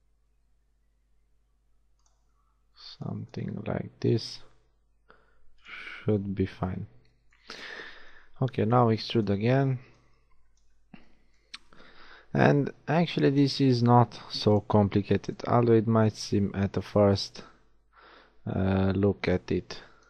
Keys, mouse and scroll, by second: 0.0 g, 2.5 a, 2.9 b, 3.6 g, 6.7 a, 8.5 b, 9.8 b, 12.7 e, 16.3 g, 19.8 a.